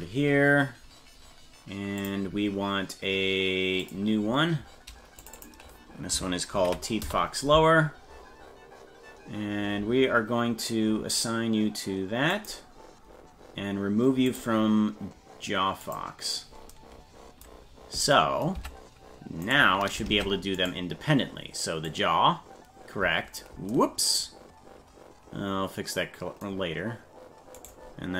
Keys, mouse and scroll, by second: 2.0 click, 3.8 click, 5.2-7.5 drag, 12.3 click, 14.3 click, 15.8 click, 18.6 Tab, 19.5 right click, 20.1 ctrl+Tab, 20.7 right click, 21.9-23.4 drag, 27.6 right click.